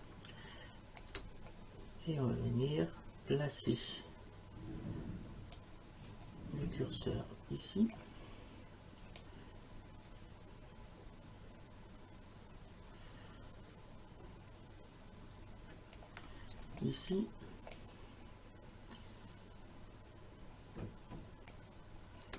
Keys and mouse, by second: 1.0 space, 5.5 click, 9.2 click, 16.6 space, 16.8 click, 17.1 space, 17.7 click, 21.5 space.